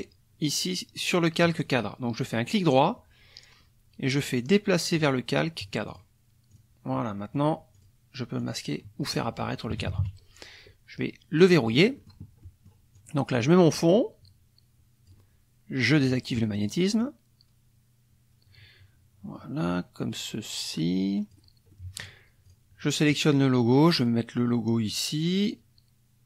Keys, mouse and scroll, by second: 2.4 click, 4.9 click, 5.9 click, 6.5 click, 7.7 click, 8.4 click, 9.1 click, 9.7 KP_Subtract, 11.4 click, 11.9 middle click, 12.4 middle click, 12.9-15.3 drag, 16.0 click, 16.5 middle click, 17.0-20.7 drag, 20.7-21.5 scroll down 2, 21.7 click, 22.4 click, 23.1-26.2 drag.